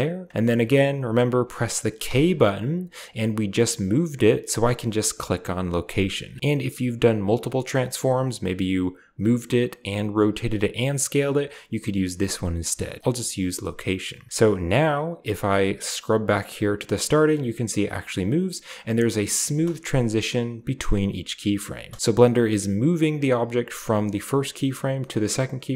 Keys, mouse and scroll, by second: 1.9 k, 5.7 click, 13.2 click, 15.7-18.0 drag, 18.6-19.2 drag, 19.3 space, 20.4-20.7 drag, 21.9-25.1 drag, 25.6 drag.